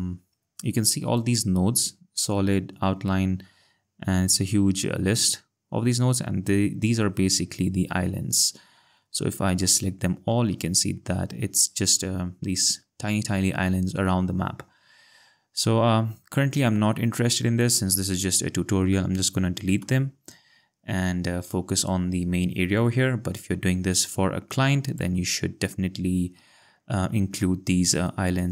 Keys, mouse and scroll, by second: 1.2 click, 6.3 click, 10.7 ctrl+scroll, 14.0-14.7 scroll, 19.8 BackSpace, 24.1 click, 27.4 ctrl+scroll, 28.4 ctrl+click.